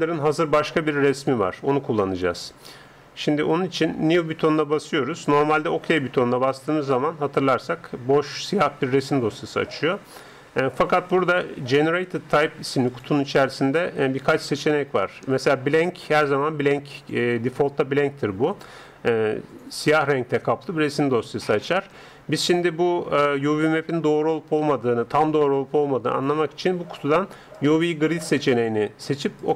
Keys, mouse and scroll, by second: 4.8-6.6 drag.